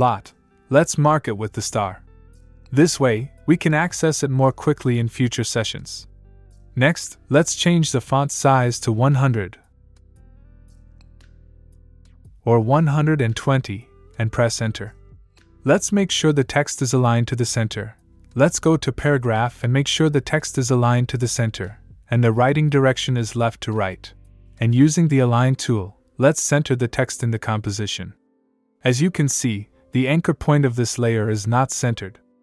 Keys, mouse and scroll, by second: 0.2-1.1 scroll up 1, 2.6 click, 3.8 click, 4.4-5.0 scroll up 1, 5.0 click, 6.6 click, 7.8 click, 9.2 click, 12.8 click, 14.5 Return, 18.2 click, 20.4 click, 22.3 click, 25.8 click.